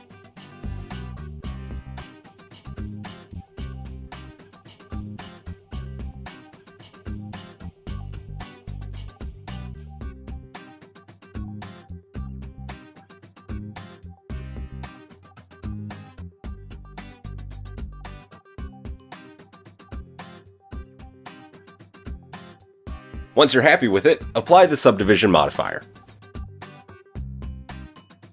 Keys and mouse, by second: 0.1 KP_1, 0.5 KP_3, 3.1 KP_1, 3.4 s, 6.1 s, 12.9 g, 14.8 click, 16.1-24.5 middle drag, 22.3 Tab, 23.0 Tab, 24.5-28.1 drag, 26.2 KP_1, 26.8 KP_3.